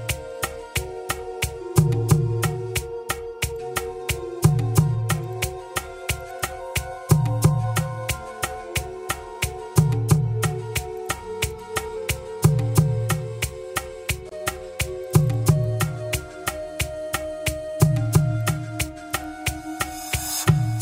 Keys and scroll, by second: 1.2 Escape, 5.9 Escape.